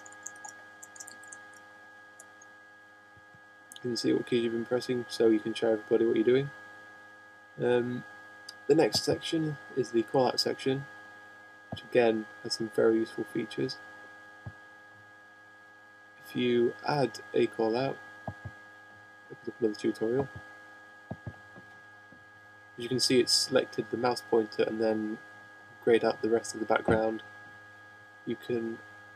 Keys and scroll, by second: 1.0 shift+/, 1.6 shift+;, 2.5 Return.